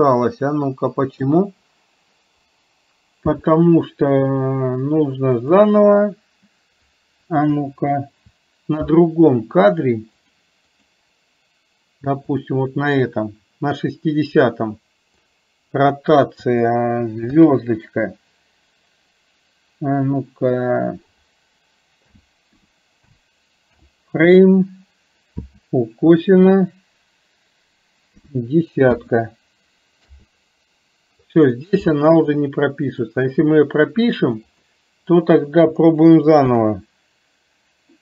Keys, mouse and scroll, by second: 1.3 click, 5.6-10.3 drag, 10.8 click, 12.4 click, 15.3-30.2 drag, 34.7-38.0 drag.